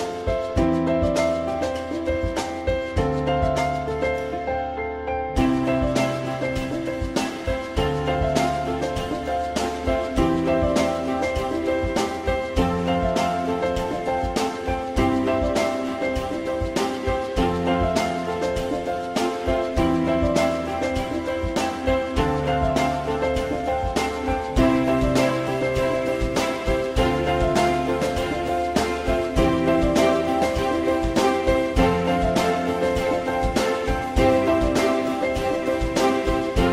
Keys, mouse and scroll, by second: 2.0 z, 12.3 click, 19.5 alt+x, 24.8 shift+click, 28.4 click, 29.0 click, 30.4 click, 34.7 F3, 35.5 F3.